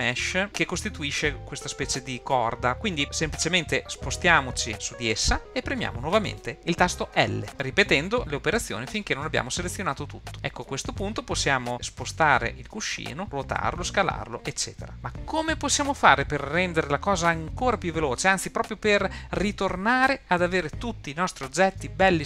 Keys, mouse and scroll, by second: 3.8 scroll up 2, 4.4-5.6 scroll down 3, 4.7-5.6 scroll up 1, 7.5 super+z, 10.3 scroll down 2, 10.3 l, 10.6 middle click, 12.0 g, 13.6 r, 14.9 super+z.